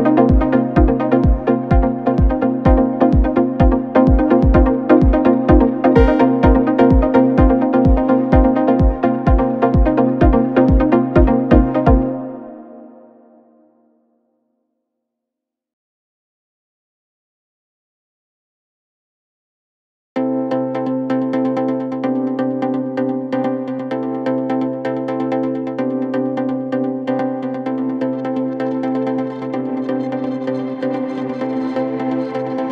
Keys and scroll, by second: 1.7 3, 4.1 ], 6.0 ], 6.9 ], 7.5 ], 9.2 ], 13.2 4, 15.9 3, 16.3 ], 18.2 g, 18.4 l, 18.7 Return, 22.3 4.